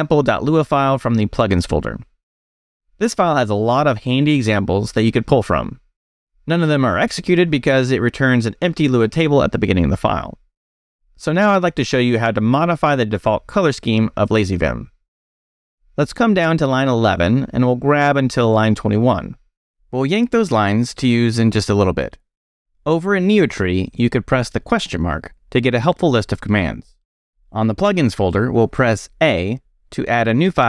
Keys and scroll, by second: 0.5 Return, 1.0 space, 1.1 e, 11.9-12.7 typing, 15.2-17.1 typing, 19.7 y, 21.2 space, 21.3 e, 24.4 shift+/, 26.0 ctrl+d, 28.2 Escape, 29.7-30.6 typing.